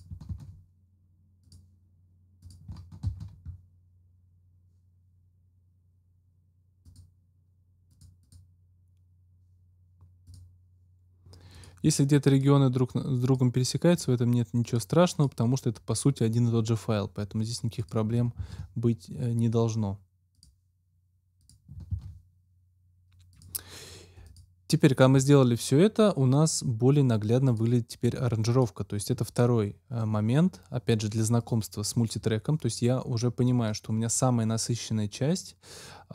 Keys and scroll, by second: 0.2 ctrl+x, 3.0 ctrl+x, 18.4 ctrl+x, 21.9 ctrl+x.